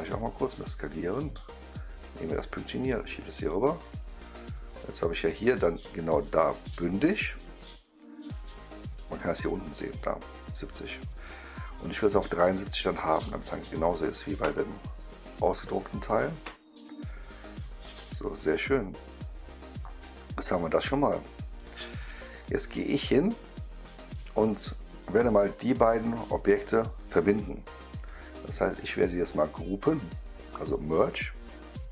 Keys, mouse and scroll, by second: 0.4 click, 2.3-8.9 drag, 9.1-9.8 right drag, 12.3-15.2 drag, 18.2 click, 18.9-21.5 right drag, 22.4 drag, 23.4 right click, 25.5 click, 26.5 shift+click, 31.3 click.